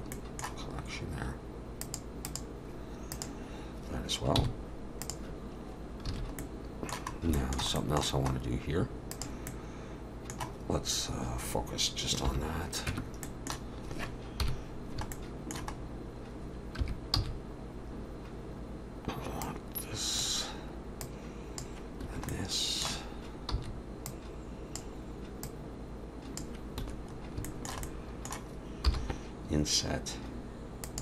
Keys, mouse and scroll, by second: 0.1 middle click, 1.8 click, 2.3 click, 3.1 click, 4.4 m, 6.1 alt+a, 6.4 middle click, 7.2 scroll up 1, 7.3 shift+middle click, 7.8 middle click, 8.3-8.8 scroll up 2, 9.1 click, 9.5 middle click, 12.3 /, 12.9 Tab, 13.2 middle click, 14.4 KP_1, 15.1 shift+middle click, 15.8 scroll up 2, 16.8 3, 17.2 c, 22.3 middle click, 23.1-23.5 scroll up 1, 23.5 c, 27.1-27.5 scroll up 3, 27.5 shift+middle click, 27.8 middle click, 28.9 i.